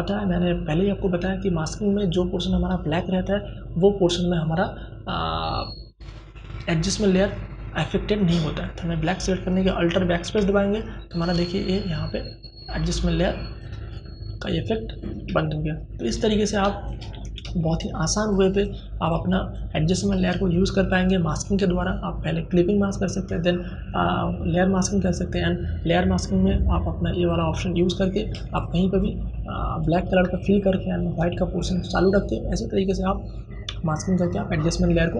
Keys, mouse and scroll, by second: 9.1 alt+BackSpace, 12.5 click, 14.1 alt+BackSpace, 15.1 space, 15.4 ctrl+click, 16.1 ctrl+d, 16.5 space, 16.7-26.2 ctrl+drag, 27.3 space, 27.5-29.5 ctrl+drag.